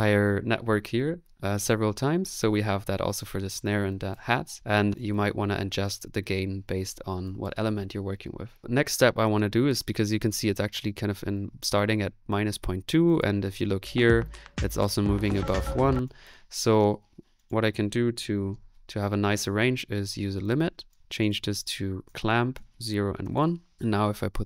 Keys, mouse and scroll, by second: 19.3-20.0 typing.